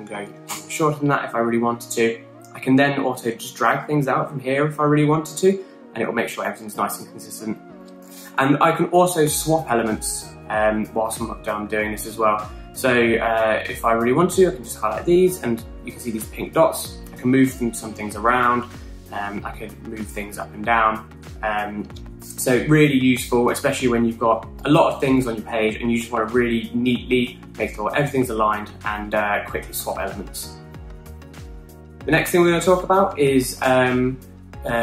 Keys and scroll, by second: 0.5-1.3 typing, 31.4-32.5 typing.